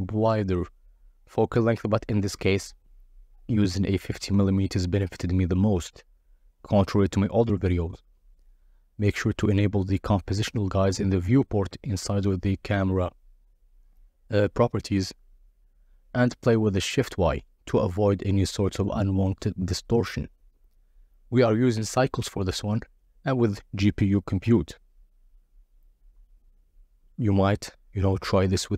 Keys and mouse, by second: 0.1 g, 0.2 x, 1.1 y, 3.5 click, 4.3 click, 5.0 click, 6.2-7.1 typing, 7.7 Return, 10.5-13.5 shift+drag, 14.6 z, 16.7-18.0 drag, 19.0-20.2 drag, 21.2 click, 22.8 z.